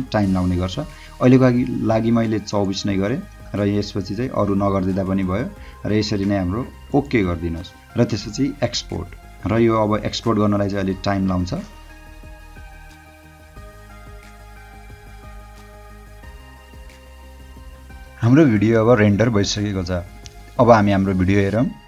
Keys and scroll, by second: 21.3 d.